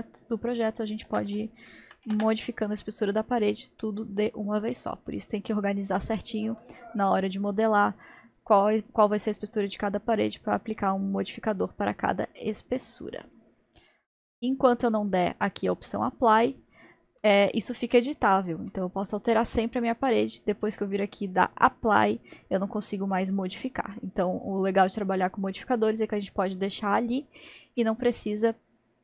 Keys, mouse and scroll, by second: 0.1-3.2 drag, 3.4-5.4 middle drag, 5.5-6.4 drag, 6.6-9.6 middle drag, 12.0-17.2 drag, 17.2-18.4 middle drag, 18.4-18.7 drag, 18.7-20.7 middle drag, 20.7-23.5 drag, 24.7-25.0 scroll down 2, 25.0-26.6 middle drag, 26.6-27.8 drag, 27.8-28.5 middle drag, 28.5-29.0 scroll up 1.